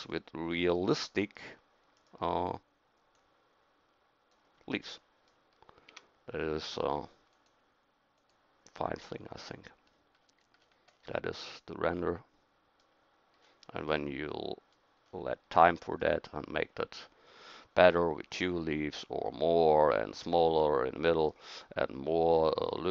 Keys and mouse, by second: 2.0-4.3 middle drag, 4.3 right click, 4.7-5.9 middle drag, 5.9 a, 6.6 middle click, 7.3-9.2 drag.